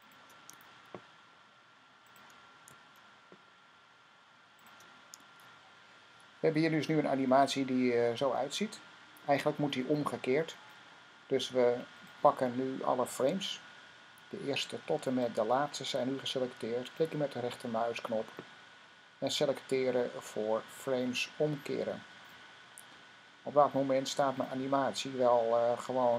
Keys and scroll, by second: 0.4 F6, 2.5 fn+F6, 5.1 F6.